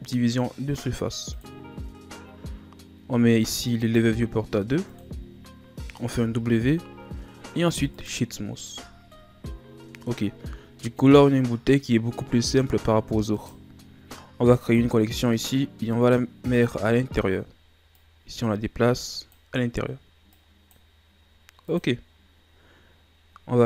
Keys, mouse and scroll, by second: 1.4-2.3 drag, 3.6-6.1 drag, 6.1 w, 8.9 scroll down 2, 9.1-10.3 middle drag, 10.3-10.8 scroll up 2, 10.8-13.3 middle drag, 13.3 right click, 14.6 click, 15.2 right click, 16.1-16.9 right drag, 16.9-17.6 scroll down 2, 17.6-17.9 scroll down 1, 17.9 click, 20.3-21.8 drag.